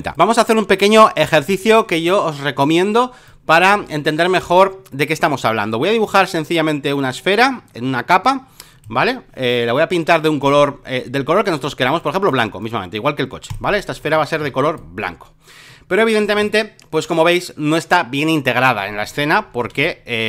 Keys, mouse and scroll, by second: 0.0-8.9 drag, 10.4-13.9 drag, 14.0 ctrl+d, 14.4 v, 14.8-18.2 drag, 19.2 alt+middle click, 19.7 space, 19.8 click.